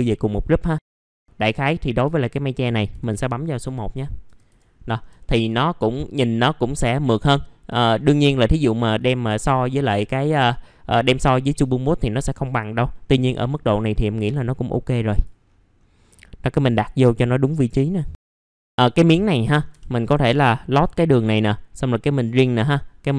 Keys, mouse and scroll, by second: 2.9 1, 4.0 scroll up 1, 4.2 F4, 4.7-5.1 scroll down 1, 5.2 alt+middle click, 5.9 alt+middle click, 7.4-7.8 scroll down 1, 7.8 middle click, 8.0 scroll down 1, 8.3 alt+middle click, 8.9 click, 9.4 scroll up 1, 10.7 middle click, 12.4 click, 13.0-14.2 scroll down 1, 14.2 click, 15.4-16.1 scroll up 2, 16.1 middle click, 18.1 click, 19.4-19.7 scroll up 1, 19.7 F4, 20.7 click.